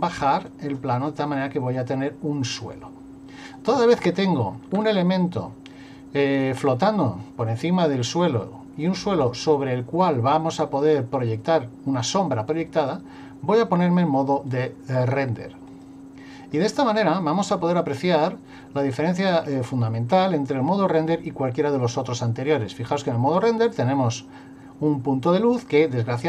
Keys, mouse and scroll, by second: 7.0 middle click, 14.5 click.